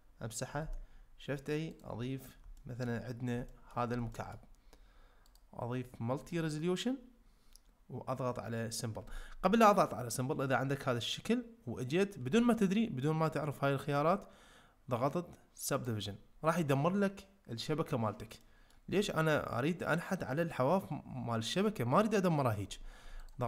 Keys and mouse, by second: 0.6 shift+a, 2.6 ctrl+middle click, 3.5 shift+middle click, 4.1 ctrl+middle click, 5.4 click, 18.4 middle click, 23.3 click.